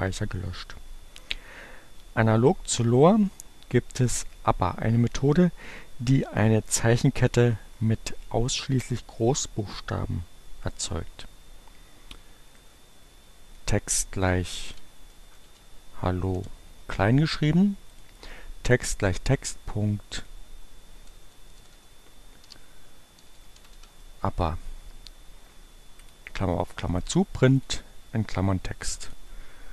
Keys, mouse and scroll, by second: 12.3-14.0 drag, 14.2-15.9 typing, 17.6 click, 19.9 click, 21.1 BackSpace, 22.3-24.1 typing, 25.7 click, 27.5 click, 29.1 click, 29.4 middle click.